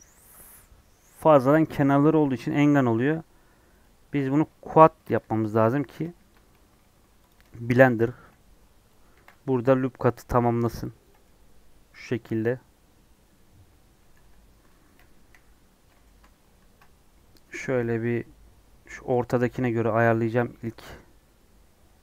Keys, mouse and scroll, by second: 4.2 click, 5.3 h, 6.1 ctrl+z, 6.6 j, 7.2 Left, 8.1 j, 9.1 ctrl+r, 11.2-14.1 middle drag, 14.1 2, 15.0 KP_1, 15.6 scroll up 1, 16.0 shift+middle click, 16.5 ctrl+b.